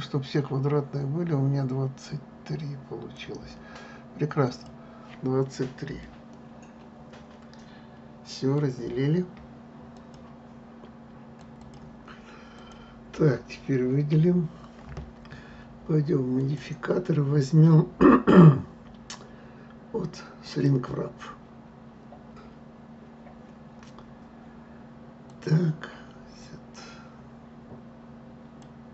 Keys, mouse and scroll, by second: 4.6 click, 6.1-11.6 middle drag, 12.5 click, 14.1 a, 16.4-19.4 drag, 25.3-28.3 drag.